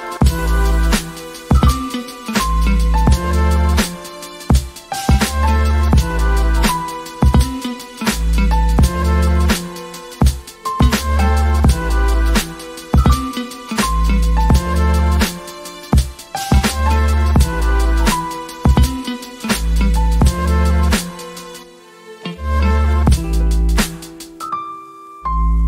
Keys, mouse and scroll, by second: 2.1 click, 2.4 o, 3.2 middle click, 3.6 shift+middle click, 3.8 middle click, 4.0 shift+middle click, 7.5 shift+middle click, 7.7 shift+middle click, 8.0 shift+middle click, 8.3 click, 11.4 click, 11.7 s, 12.2 click, 14.9 click, 15.2 s, 21.1 click, 21.6 click, 22.1 KP_Decimal, 22.6 s, 23.6 click.